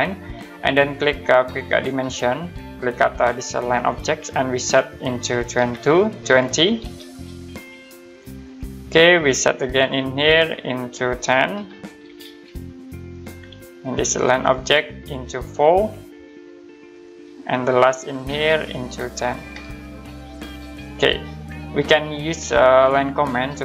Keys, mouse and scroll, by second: 1.7 click, 3.7 click, 5.6-7.4 typing, 8.4 click, 10.4 click, 11.5-12.0 typing, 13.1 click, 15.9 4, 16.9 click, 19.4-19.9 typing, 20.8 click, 22.7 click.